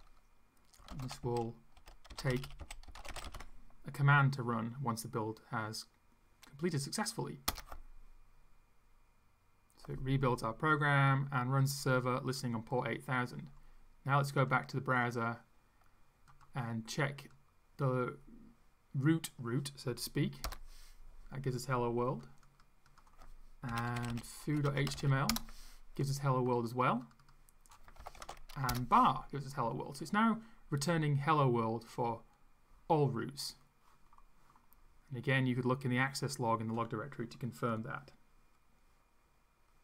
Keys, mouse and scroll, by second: 0.0-4.0 typing, 7.5 Return, 14.4 click, 16.3 click, 17.2 click, 20.5 Return, 22.4 click, 22.9 click, 23.5-25.4 typing, 27.0 click, 27.7-28.7 typing, 31.9 click.